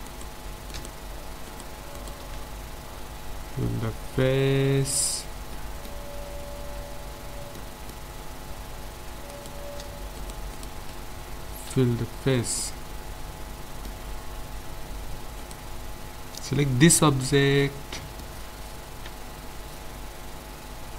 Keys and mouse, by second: 0.1-3.8 right drag, 3.4 f, 3.6 middle click, 3.8 middle click, 4.2-6.7 middle drag, 9.3-12.5 right drag, 11.7 f, 12.3 middle click, 14.1 Tab, 15.4-17.1 right drag, 19.1 Tab.